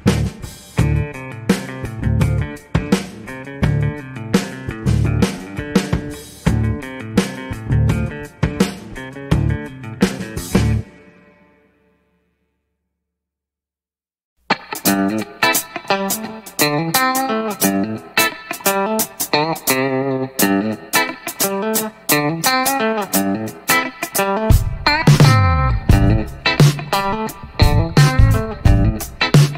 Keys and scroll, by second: 4.2 a, 4.4 a, 6.4 g, 6.5 x, 22.8 a, 23.2 a, 26.2 g, 26.5 y.